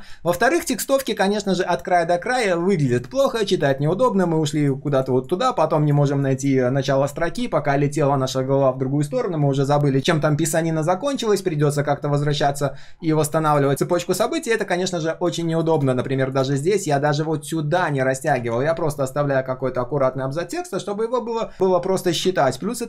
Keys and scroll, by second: 1.4 ctrl+z, 18.4 ctrl+z.